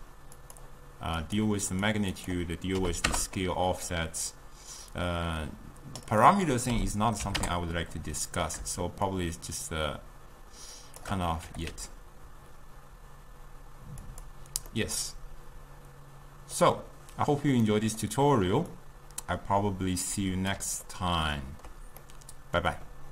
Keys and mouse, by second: 1.3 click, 2.2-11.6 drag, 11.6 g, 14.8-18.8 middle drag, 18.8-20.9 drag, 20.9-23.1 ctrl+middle drag.